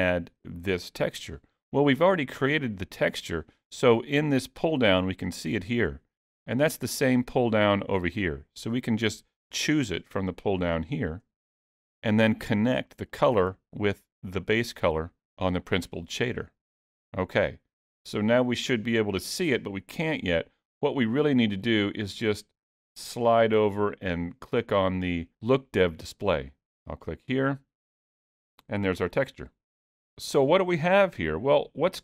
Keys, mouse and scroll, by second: 4.1 click, 7.5 click, 13.1 click, 21.3 middle click, 27.2 click, 31.5 scroll up 2, 31.7 shift+middle click.